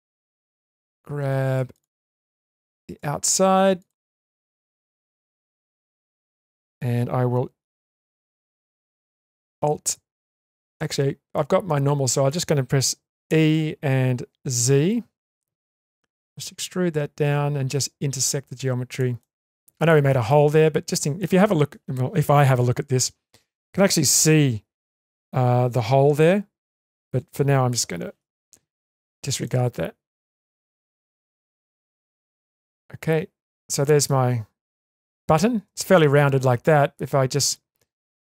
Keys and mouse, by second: 1.2 2, 1.7 click, 3.8 click, 5.4 shift+click, 5.9 middle click, 11.4 middle click, 13.3 e, 19.2-19.8 middle drag, 20.3-21.2 middle drag, 29.4-32.7 middle drag, 33.1 Tab, 33.8-35.1 middle drag, 35.5 Tab, 35.9 middle click, 37.3 click.